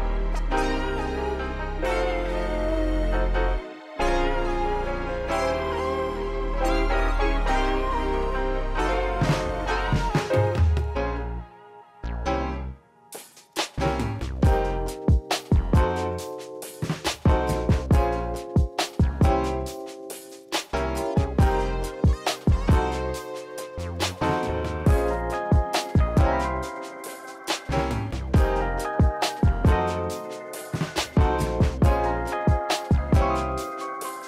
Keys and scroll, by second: 5.2 m, 7.5 ctrl+z, 9.2 m, 12.1 ctrl+s, 12.8 ctrl+alt+shift+b, 20.7 q, 21.8 q, 23.2 q, 25.0 ctrl+alt+shift+b, 31.7 ctrl+s.